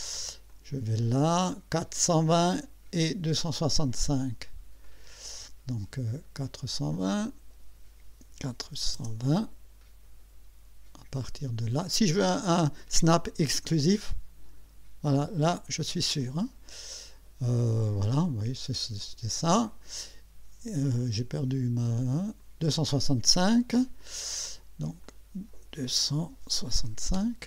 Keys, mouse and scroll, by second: 0.5 click, 4.8 click, 6.9 click, 8.3 KP_4, 8.6 KP_2, 9.0 KP_0, 9.6 space, 13.2 click, 16.2 click, 19.0 click, 21.3 click, 22.4 click, 24.0 click, 25.0 click, 26.0-27.3 typing.